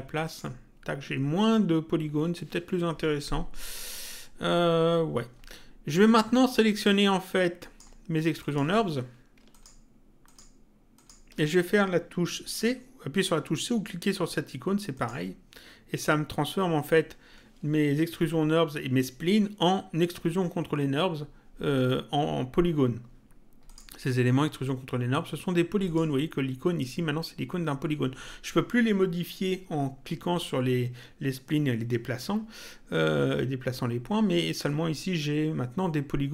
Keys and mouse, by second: 7.3 click, 9.5 ctrl+click, 14.9 click, 23.7 click, 25.8 click.